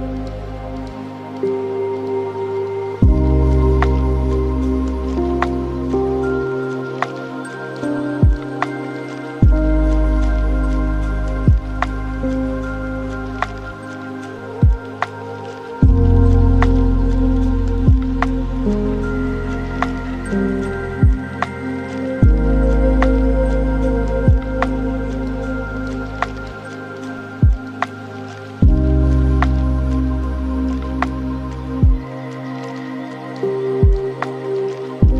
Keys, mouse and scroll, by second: 1.0 shift+a, 3.8-5.5 drag, 5.8 shift+d, 7.3-9.0 drag, 9.0-10.4 middle drag, 10.4 click, 12.9 space, 14.4 space, 15.0-23.2 drag, 23.4-27.9 drag, 27.9 scroll down 2, 28.1 scroll up 1, 28.2-28.6 scroll down 3, 28.6-31.0 middle drag, 31.0-32.1 drag, 32.1-34.0 middle drag, 34.0 click, 34.7 scroll up 2.